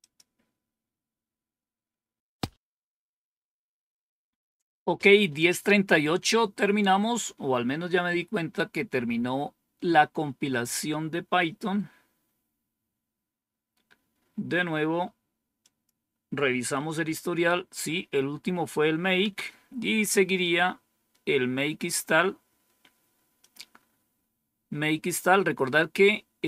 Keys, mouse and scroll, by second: 0.1 click, 15.5 click, 16.7 Up, 19.2 Down, 21.9-23.4 scroll down 2, 23.4 click, 23.8-24.3 scroll down 1, 24.7 scroll down 1.